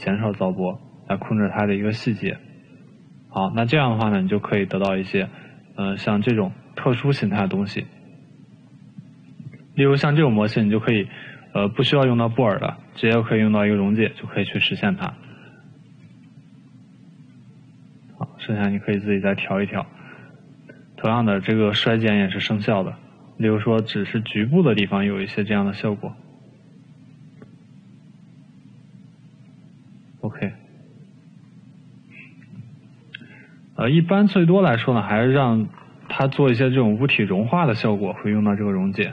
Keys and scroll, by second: 20.7 ctrl+z, 35.1 Delete.